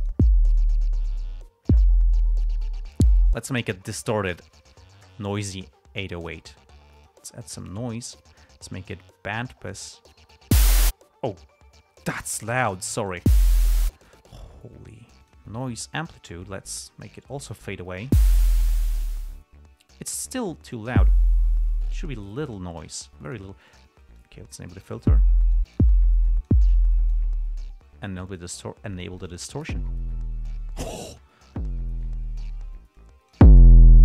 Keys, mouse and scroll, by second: 0.2 click, 0.9-1.6 drag, 7.3 click, 8.0 click, 9.6 click, 12.4-13.6 drag, 15.6 click, 16.8 click, 17.8-18.6 drag, 20.5 click, 23.6 click, 24.0 click, 24.5-25.4 drag, 25.9-26.3 drag, 26.6 click, 27.3 click, 28.6 click, 29.3 click, 33.3 click.